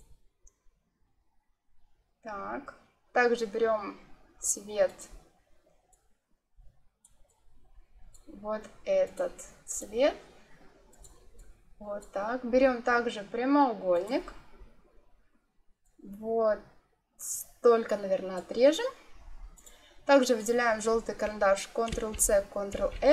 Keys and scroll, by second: 21.8 ctrl+c, 22.6 ctrl+f.